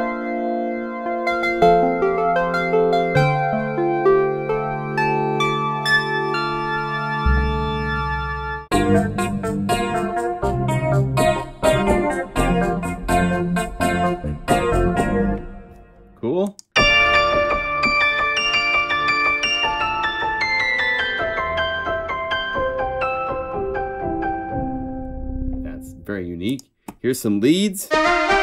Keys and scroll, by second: 8.6 F4, 9.1 F4, 9.7 F4, 11.6 F4, 13.0 F2, 13.0 F4, 13.2 F3, 13.7 F2, 13.8 F4, 15.0 F3, 15.0 F4, 16.7 F4, 18.3 F4, 19.4 F4, 27.9 F3.